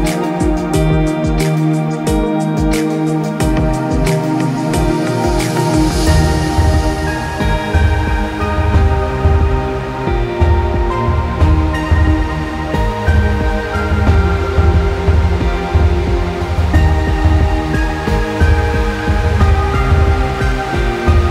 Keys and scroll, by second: 5.8 Escape, 8.3 typing, 8.6 Return, 11.1-11.6 typing, 11.8 Return.